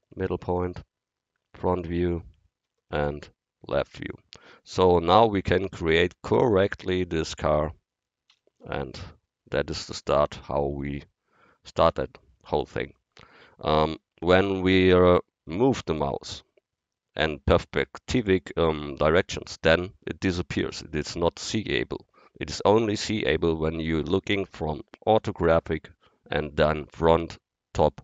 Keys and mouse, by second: 0.3 KP_1, 2.7 ctrl+KP_3, 8.3 n, 14.0 KP_1, 19.5-27.0 middle drag, 27.0 KP_1.